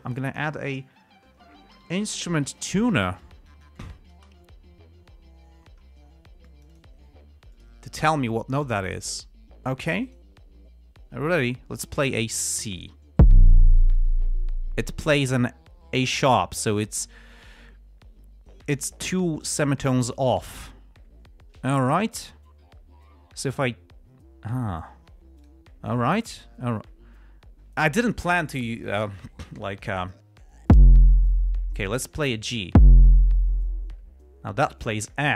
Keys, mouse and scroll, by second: 0.4 click, 1.8-5.2 typing, 6.8 click, 7.9 click, 10.2 click, 25.8 click, 26.7 click.